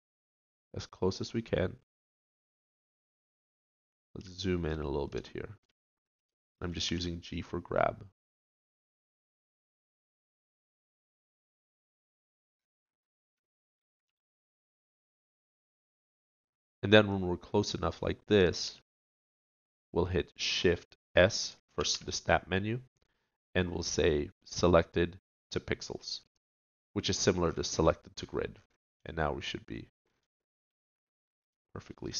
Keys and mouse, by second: 6.9 g, 14.1 g, 18.7 g.